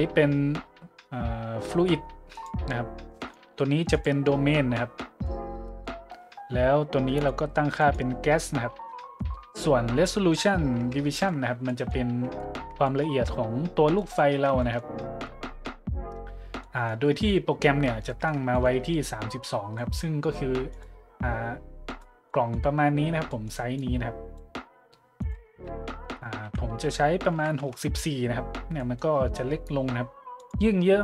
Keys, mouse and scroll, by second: 2.3-2.7 drag, 3.2-3.6 drag, 3.9-4.3 drag, 4.7-5.2 middle drag, 5.6-6.0 middle drag, 7.2 click, 7.8 click, 9.0 click, 11.1-11.5 shift+middle drag, 11.7-12.0 middle drag, 12.4-12.7 shift+middle drag, 12.8-13.3 middle drag, 13.9-14.3 middle drag, 14.6-14.9 shift+middle drag, 15.0-15.5 middle drag, 16.6-16.9 middle drag, 18.1-18.9 middle drag, 19.8-20.1 middle drag, 20.7 right click, 21.0 middle click, 21.9 right click, 22.3-22.6 middle drag, 23.3-23.6 middle drag, 23.8-24.4 drag, 25.2 click, 26.4 KP_6, 27.3 KP_4, 27.6 KP_Enter, 29.1-29.4 middle drag, 30.4 click.